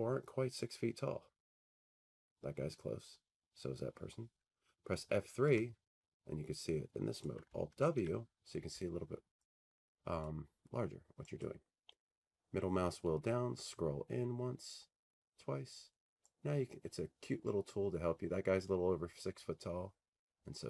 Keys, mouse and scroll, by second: 5.5 F3, 7.3 click, 7.8 alt+w, 10.3 click, 11.4 click, 13.1 middle click, 14.2 middle click, 15.0 middle click.